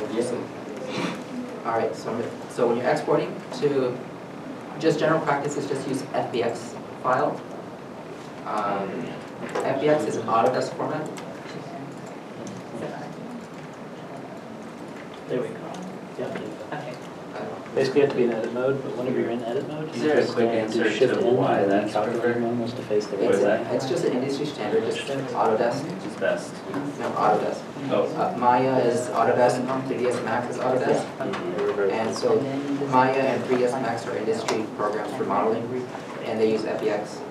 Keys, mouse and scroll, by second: 1.4 shift+middle click.